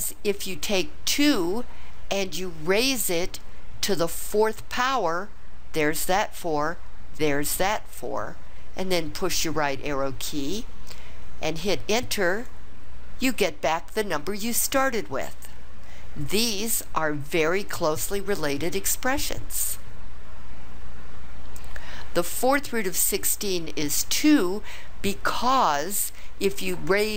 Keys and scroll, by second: 1.2 2, 2.9 ^, 4.2 4, 9.2 ), 12.4 Return.